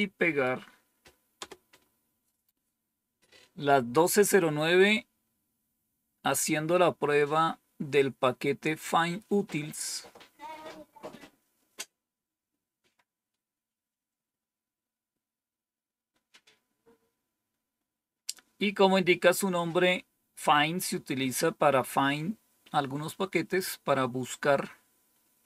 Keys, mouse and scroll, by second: 1.3 Return, 13.6-14.8 scroll down 2, 15.6-16.4 scroll down 2.